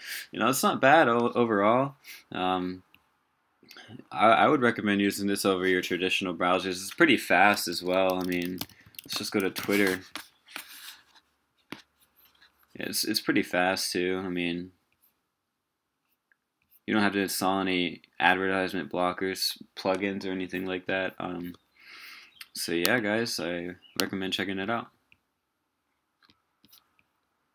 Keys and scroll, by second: 7.7 super+t.